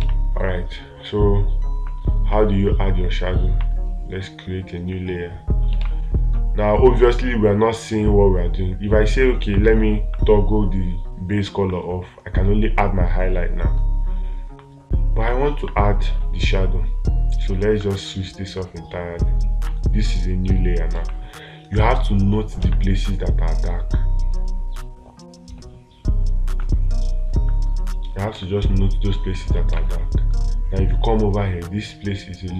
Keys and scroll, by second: 6.2 space, 21.4 space, 23.1 space, 28.8 space, 30.2 space.